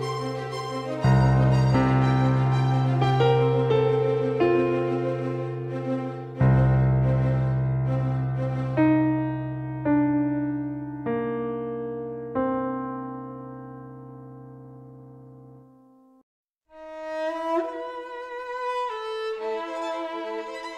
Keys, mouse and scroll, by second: 5.2-7.6 right drag, 6.1-10.1 drag, 9.7-14.3 middle drag, 11.7-15.1 drag, 15.1-16.4 middle drag, 15.5 KP_0, 20.0 click.